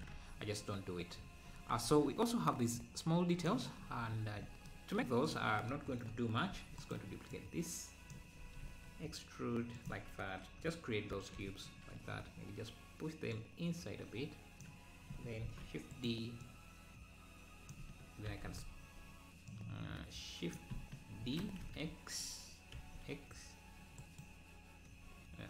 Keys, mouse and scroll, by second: 0.1 Tab, 0.6-0.9 scroll down 1, 1.1-1.7 scroll up 3, 1.8 Tab, 2.7-3.8 drag, 3.8 scroll down 1, 5.4 click, 6.5 shift+d, 7.4 click, 8.6 e, 11.1 ctrl+l, 13.4 click, 15.4 shift+d, 16.5 click, 18.3 shift+r, 18.5 shift+r, 19.5 click, 21.3 shift+e.